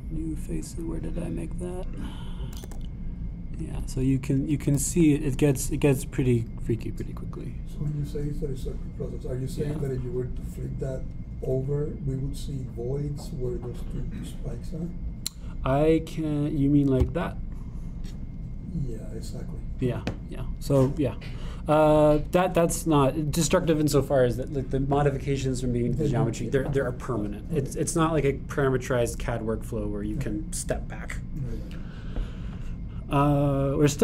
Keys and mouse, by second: 3.0 click, 3.7 e, 5.7 g, 18.0 click.